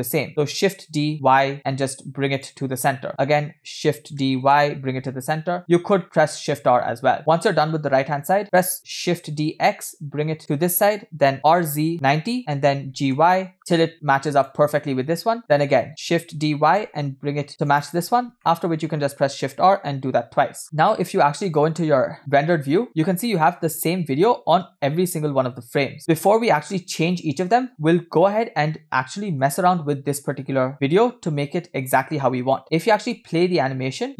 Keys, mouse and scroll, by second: 0.7 shift+d, 2.9 shift+middle click, 4.3 shift+d, 6.0 shift+middle click, 15.4-16.0 scroll down 3, 15.5-15.8 shift+middle drag, 18.0-18.4 scroll down 2, 18.4 shift+middle click, 19.7 shift+r, 20.6 scroll up 1, 21.5 scroll up 1, 21.5 click, 22.7 scroll up 2, 23.0 scroll down 2, 29.1 middle click, 29.6 scroll up 1, 32.0 click.